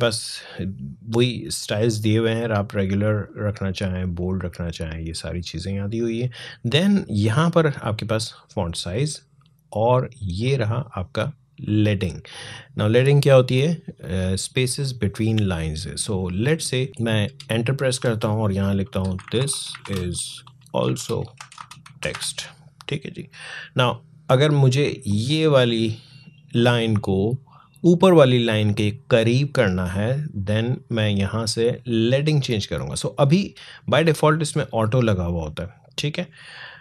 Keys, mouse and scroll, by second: 1.4 click, 16.2 click, 17.0 Return, 18.6-22.4 typing, 24.9-29.2 drag, 30.3 click, 33.4 click, 35.9 click.